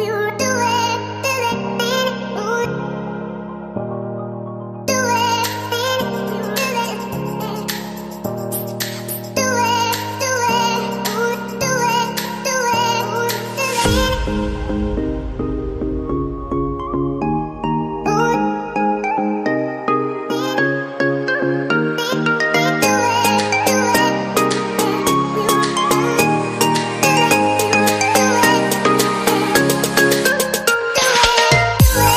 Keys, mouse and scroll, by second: 18.1 shift+click, 18.9 typing, 26.4 shift+click.